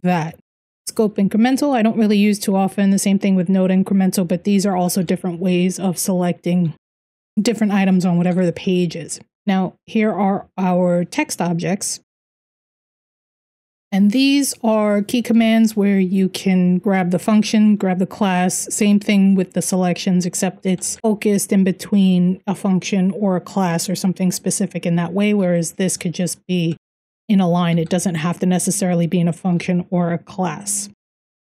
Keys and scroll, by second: 0.0 Escape, 0.2-0.9 typing, 3.8-4.6 typing, 8.1-9.9 typing, 13.0-14.9 typing, 20.3 k, 20.5 k, 25.4-27.6 typing, 29.2-31.5 typing.